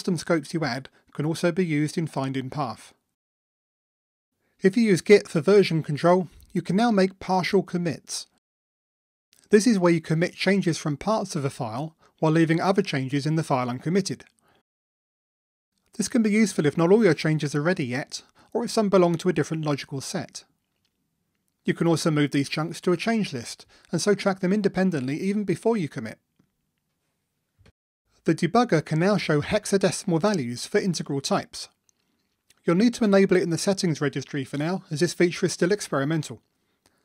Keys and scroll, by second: 0.8 ctrl+shift+super+f, 9.2 super+k, 31.5 ctrl+d, 36.3 super+F2.